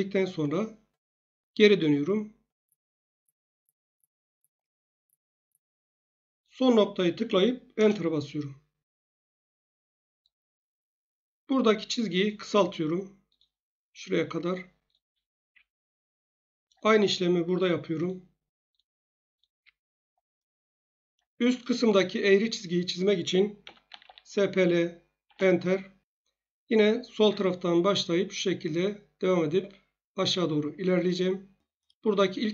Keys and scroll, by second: 7.8 Return, 15.4 Escape, 19.5 Escape, 23.6-24.4 typing, 25.2 Return.